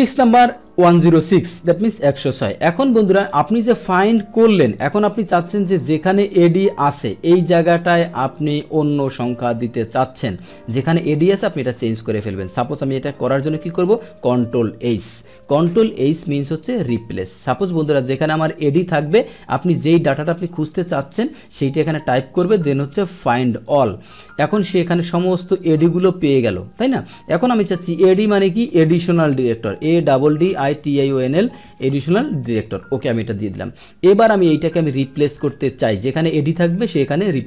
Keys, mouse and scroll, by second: 3.6-4.7 drag, 5.7 click, 8.3 click, 10.6 click, 11.2 middle click, 15.2 ctrl+h, 16.4 click, 18.4 click, 23.6 click, 25.4 click, 27.5 click, 36.2 click, 37.2 click.